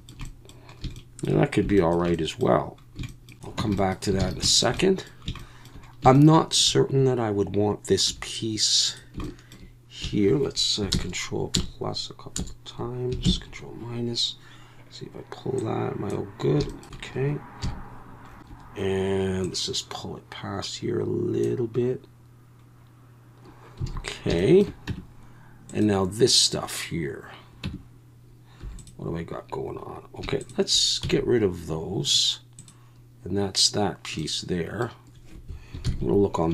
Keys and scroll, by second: 3.6 Tab, 4.2 alt+a, 8.1 3, 10.9 ctrl+KP_Add, 11.5 ctrl+KP_Add, 12.4 ctrl+KP_Add, 13.2 ctrl+KP_Subtract, 17.6 KP_1, 23.9 alt+a, 24.9 Tab, 27.6 Tab, 28.6 3, 31.0 x, 35.8 ctrl+KP_1.